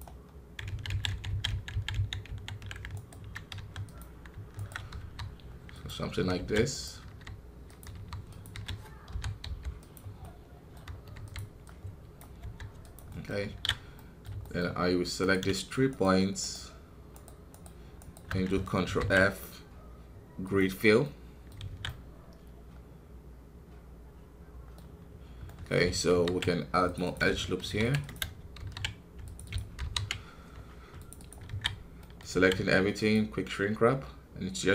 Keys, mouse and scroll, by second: 0.4 scroll up 1, 0.6 ctrl+z, 2.9 alt+right click, 3.5 x, 4.5 alt+right click, 4.9 r, 10.2 middle click, 11.1 e, 11.6 click, 12.3 s, 13.0 middle click, 13.5 alt+a, 13.9 middle click, 14.6 scroll up 1, 16.3-18.8 shift+right drag, 18.8 ctrl+f, 21.0 middle click, 21.6 alt+a, 21.8-25.1 middle drag, 25.1-25.4 scroll down 1, 25.4 middle click, 26.1 ctrl+r, 31.7 scroll down 2, 31.9 middle click, 32.3 a, 32.9-34.7 drag.